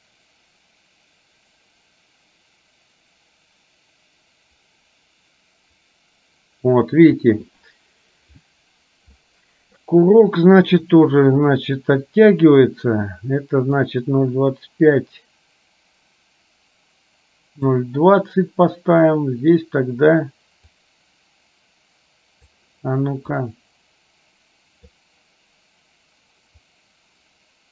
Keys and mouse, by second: 14.0-17.8 drag, 20.8-22.6 drag, 23.7-25.2 drag, 26.7-27.7 drag.